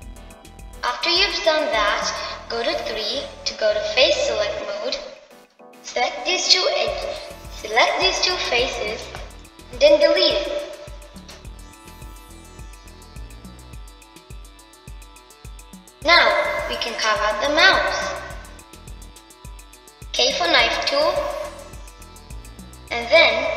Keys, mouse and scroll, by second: 10.7 shift+click, 13.8-16.8 middle drag, 17.0-20.1 middle drag.